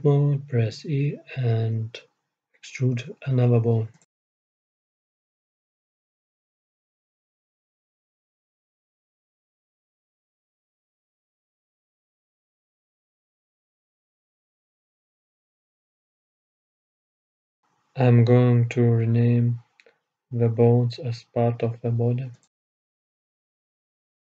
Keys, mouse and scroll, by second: 1.3 Tab, 2.8 e, 5.8 e, 9.2-11.1 middle drag, 11.1 e, 13.1-14.2 middle drag, 14.2-15.7 scroll down 1, 15.7-17.7 drag, 18.3-22.2 middle drag, 22.2-23.9 right drag.